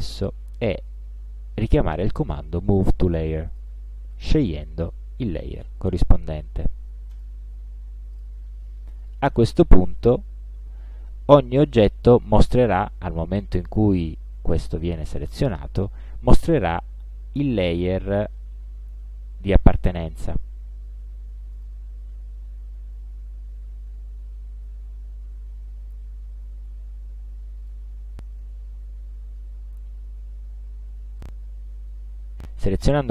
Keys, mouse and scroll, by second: 3.6 click, 4.9 click, 7.2 click, 8.2 click, 9.1 click, 10.1 click, 12.2 click, 19.9 click, 21.6 click, 27.7 click, 31.2 click, 32.3 click.